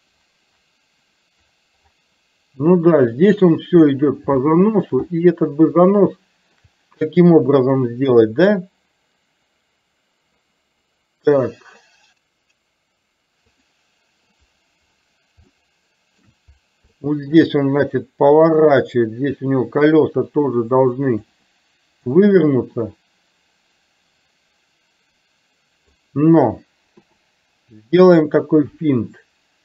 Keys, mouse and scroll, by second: 4.6-4.9 shift+middle drag, 5.9-6.6 shift+middle drag, 7.9 click, 13.7 click, 15.6-16.3 shift+middle drag, 16.9-17.4 shift+middle drag, 18.4-21.4 drag, 22.3-25.9 middle drag, 27.1 KP_7.